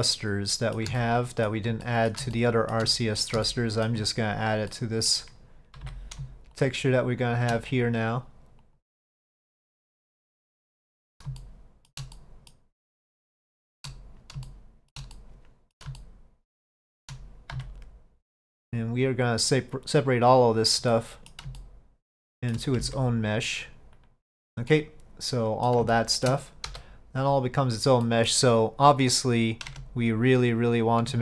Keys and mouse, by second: 1.0 shift+middle click, 1.9 middle click, 2.4 shift+middle click, 3.0 middle click, 3.5 shift+middle click, 4.8 middle click, 9.5 middle click, 10.8 middle click, 11.5 shift+middle click, 12.2 middle click, 12.9 middle click, 13.6 shift+middle click, 14.5 shift+middle click, 15.2 middle click, 16.1-17.1 shift+middle drag, 21.0 middle click, 21.6-22.6 shift+middle drag, 24.8-25.8 middle drag, 26.0 shift+middle click, 28.1 right click, 29.2 click, 29.8 Tab, 30.4 click.